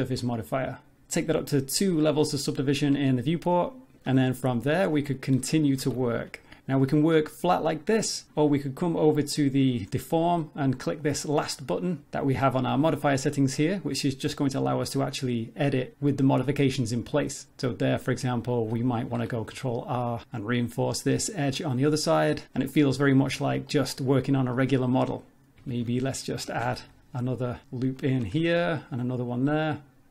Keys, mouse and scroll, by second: 1.7 click, 4.1 Tab, 4.3 middle click, 4.9 scroll up 2, 5.8 ctrl+r, 6.8 scroll down 3, 6.9 middle click, 14.7 click, 16.2 middle click, 17.5 middle click, 17.8-18.9 scroll up 4, 19.2 ctrl+r, 22.7 middle click, 23.3 Tab, 23.5 scroll down 3, 23.7 middle click, 24.6 middle click, 24.9-25.5 scroll up 1, 25.5-25.9 scroll up 3, 25.6 Tab, 26.6 ctrl+r, 28.1 ctrl+r.